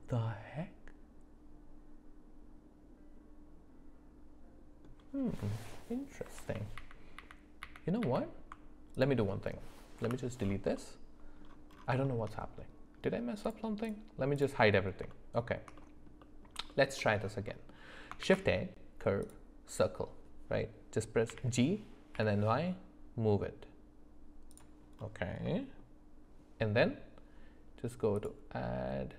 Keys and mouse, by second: 6.4-8.5 ctrl+z, 8.9 click, 10.0 Delete, 10.8 middle click, 12.0 shift+middle click, 13.4 click, 13.8 click, 15.1 shift+middle click, 15.8 middle click, 16.2 middle click, 16.7 shift+middle click, 17.5 middle click, 18.2 shift+a, 21.3 g, 25.5 middle click, 28.2-29.1 drag.